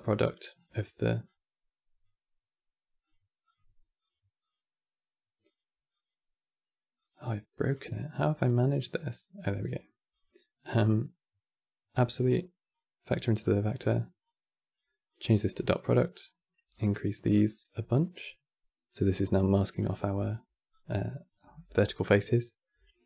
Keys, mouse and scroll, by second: 1.0 click, 2.7-12.5 drag, 13.9-20.4 drag.